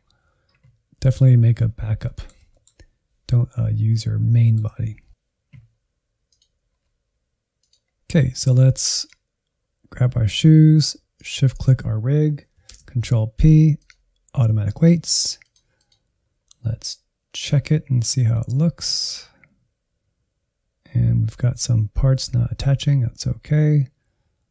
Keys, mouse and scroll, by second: 1.9-3.6 middle drag, 3.6-4.2 scroll up 4, 4.3 shift+middle click, 5.1-8.0 drag, 8.9-12.6 drag, 12.6 ctrl+p, 14.6-24.5 drag.